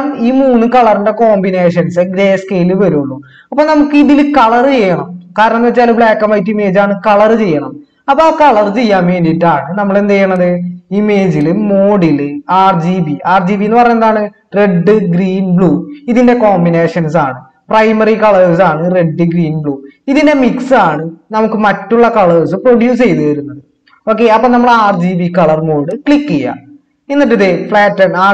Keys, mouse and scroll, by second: 8.7 ctrl+z.